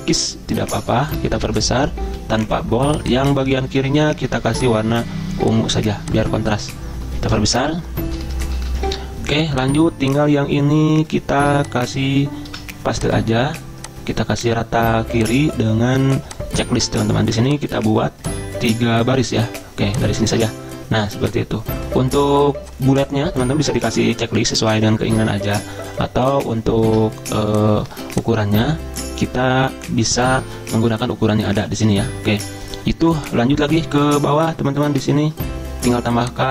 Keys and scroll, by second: 1.1 ctrl+], 1.2 ctrl+], 1.4 ctrl+], 1.4 ctrl+], 2.0 ctrl+b, 7.5 ctrl+], 7.8 ctrl+], 7.9 ctrl+], 11.4 ctrl+c, 12.5 ctrl+v, 20.3 Return, 26.8 ctrl+z, 27.9 ctrl+z.